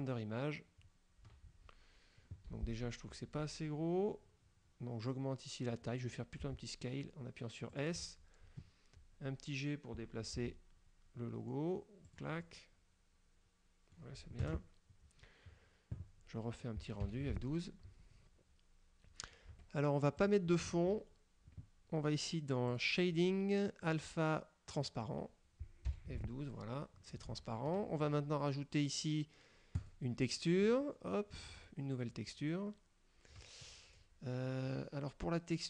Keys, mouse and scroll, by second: 0.0 click, 1.6 scroll down 1, 2.6 Escape, 2.9 scroll down 1, 6.6 s, 7.8 click, 10.5 g, 12.1 click, 12.6 middle click, 12.6-14.2 drag, 14.5 KP_0, 17.1 F12, 19.6 Escape, 20.3 click, 20.8 Escape, 22.8 click, 24.0 click, 24.8 click, 26.0 F12, 27.4 Escape, 29.9 click, 30.8 click.